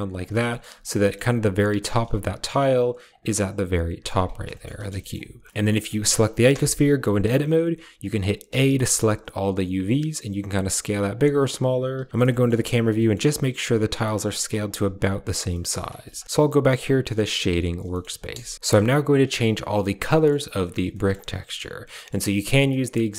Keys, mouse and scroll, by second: 0.3 shift+click, 0.9 shift+click, 1.8 s, 4.1 Tab, 4.4 shift+click, 4.7 click, 4.9 shift+click, 5.5 drag, 5.9 shift+click, 6.4 Tab, 8.3 a, 9.9 s, 11.8 KP_0, 12.1 shift+middle click, 12.8 shift+middle click, 13.4 s, 15.4 shift+click, 15.8 Tab, 16.0 shift+click, 16.2 a, 18.5 ctrl+v, 20.0 middle click, 20.9 shift+middle click, 21.3 middle click, 21.8 middle click, 22.4 shift+middle click, 23.0 middle click.